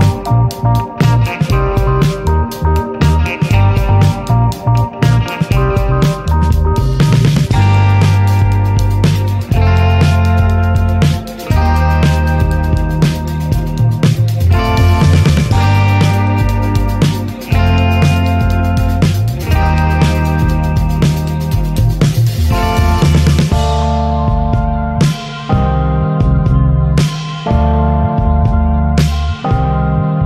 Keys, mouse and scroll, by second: 0.3 ctrl+s, 2.8 click, 4.3 click, 5.4-5.8 drag, 5.8 middle click, 6.3 scroll up 1, 6.4 click, 6.5 shift+a, 8.7 middle click, 9.0 click, 9.2 shift+a, 11.2 middle click, 11.3 shift+a, 14.5 ctrl+shift+click, 15.5 scroll down 3, 15.6-16.1 middle drag, 16.1 click, 17.1 click, 17.7 click, 18.2 shift+d, 19.2 middle drag, 19.5-20.4 scroll up 3, 20.4-20.9 drag, 21.6-22.0 scroll up 4, 22.0-28.1 drag, 28.1 ctrl+s, 28.2 scroll down 1, 28.3 middle drag, 28.7 ctrl+shift+click, 29.2 scroll up 2, 29.5-30.2 drag.